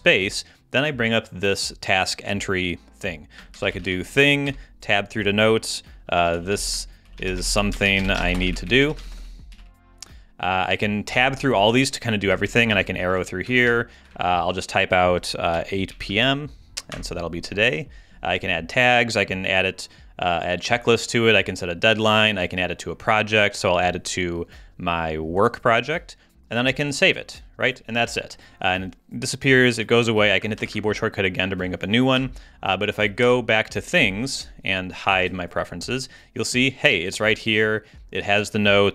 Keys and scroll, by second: 3.3-4.3 typing, 4.5 Tab, 5.9-10.0 typing, 11.1 Tab, 12.3 Down, 12.7 Right, 13.1 Down, 13.5 Up, 15.3-16.6 typing, 16.9 Return, 30.6 ctrl+space, 33.2 super+Tab.